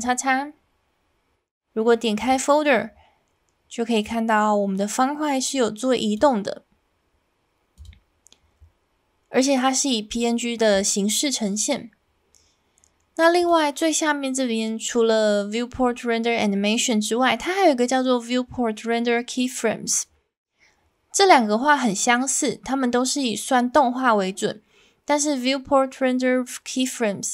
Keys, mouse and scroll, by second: 13.4-27.3 drag.